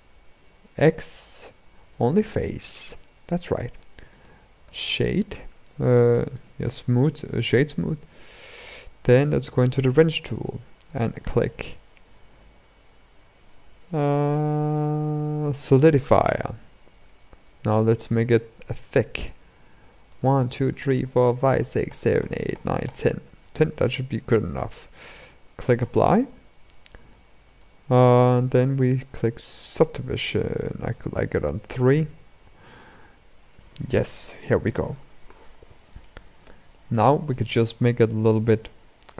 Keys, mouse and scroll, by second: 0.1 x, 2.1-3.3 middle drag, 3.3 Tab, 3.8 right click, 4.8-5.4 scroll down 4, 5.4-6.0 scroll up 3, 6.0-8.1 right drag, 8.1-9.3 middle drag, 9.3 click, 10.9 click, 16.2-17.4 middle drag, 17.4-18.1 scroll up 5, 18.1-19.8 shift+middle drag, 19.8-23.1 drag, 23.1-25.5 middle drag, 25.5-26.5 drag, 26.7 click, 29.3-32.4 drag, 32.4-35.5 middle drag, 36.4-37.1 middle drag, 37.1-37.7 scroll down 4, 37.7-39.1 shift+middle drag.